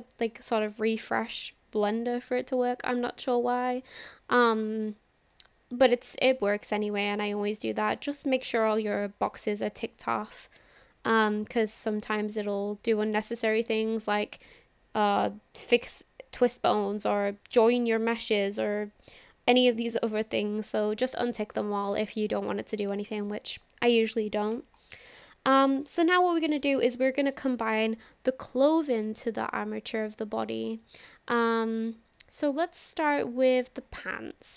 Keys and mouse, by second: 1.5 shift+middle click, 4.3-5.4 shift+middle drag, 5.8 shift+middle click, 6.3-7.7 middle drag, 8.7-10.8 drag, 11.2 middle click, 13.4-20.8 drag, 21.7-23.2 middle drag, 25.4 shift+middle click, 25.7 click, 26.1-27.4 middle drag, 29.4-30.4 drag, 30.4 middle click, 33.5 click.